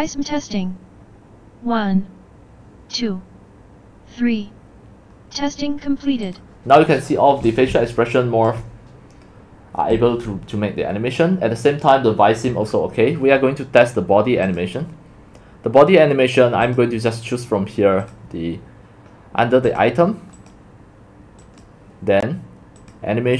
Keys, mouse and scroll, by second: 6.4 click, 7.5-10.0 typing, 13.1 click, 13.4 click, 13.6 typing, 20.4 click, 22.8 click.